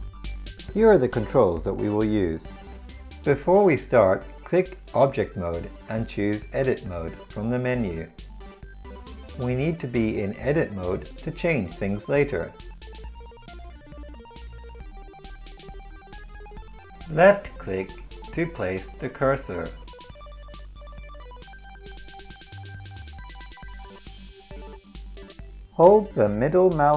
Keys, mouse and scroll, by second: 0.7-3.0 middle drag, 9.3 middle click, 25.6 click, 26.7-26.9 middle drag.